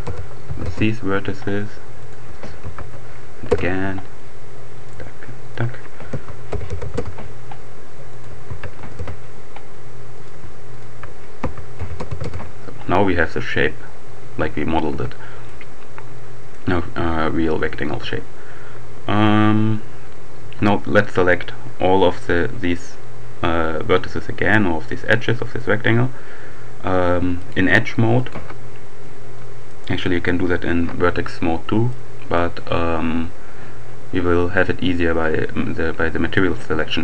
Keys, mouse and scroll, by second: 0.1 ., 0.3 2, 0.6 Return, 2.0 shift+click, 2.4 s, 3.5 Return, 4.7 click, 4.9-5.9 shift+right drag, 6.0 s, 6.5 0, 6.7 ., 6.9 2, 7.0 Return, 8.0 right click, 8.5 shift+s, 8.9 shift+Return, 10.1 right click, 11.4 shift+s, 11.8 0, 11.9 ., 12.1 2, 12.3 Return, 14.9 Tab, 15.5-17.0 drag, 17.9 Tab, 19.9 d, 26.9-28.0 drag, 28.2 alt+click, 29.7 click, 31.9 click.